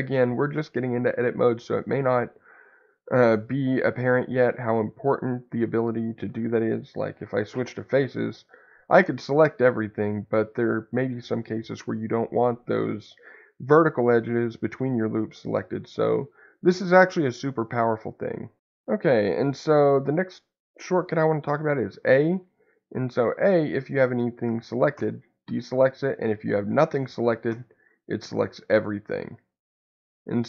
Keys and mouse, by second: 8.3 click, 10.2 middle click, 15.4 click, 29.8-30.4 middle drag.